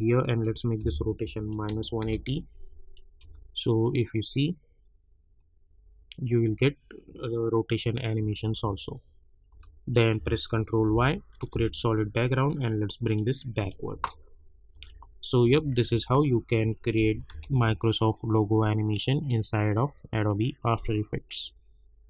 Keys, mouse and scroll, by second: 0.2 click, 0.8 -, 2.0 Return, 2.9 click, 3.2 space, 8.1 space, 9.9 click, 10.7 ctrl+y, 11.5 Return, 12.6-13.9 drag, 13.9 space, 16.1 click, 17.0 n, 17.3 space.